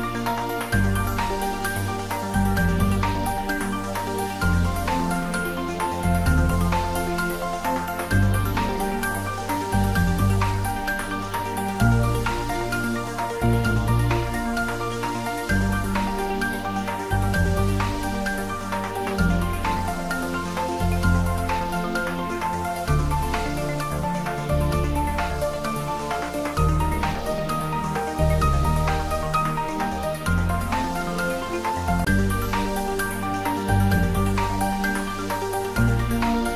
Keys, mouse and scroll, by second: 0.8 e, 3.3 click, 3.9 s, 6.0 click, 6.6 e, 7.4 click, 7.9 s, 9.6 click, 10.1 e, 10.7 click, 12.1 s, 12.7 click, 13.4 e, 14.1 click, 14.8 s, 16.7 click, 27.1 scroll up 1, 27.9 scroll down 1, 29.0 click, 29.7-31.5 scroll up 1, 32.2 2, 32.3 click, 33.0 x, 34.4 click, 36.0 alt+shift+click.